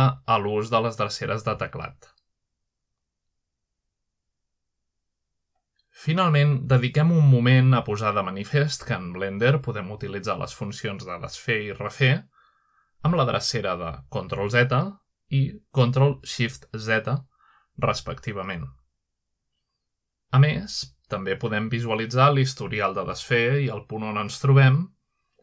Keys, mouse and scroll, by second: 1.1-2.8 drag, 3.1 middle click, 3.5 middle click, 4.5-6.3 drag, 6.5-7.3 middle drag, 7.5 click, 8.3 click, 8.8 click, 9.4 click, 9.9 click, 10.3 click, 11.1-13.1 scroll down 1, 14.1 click, 14.9 shift+middle click, 16.2 ctrl+middle click, 17.4 ctrl+z, 18.5 ctrl+shift+z, 19.5 ctrl+z, 22.8 click.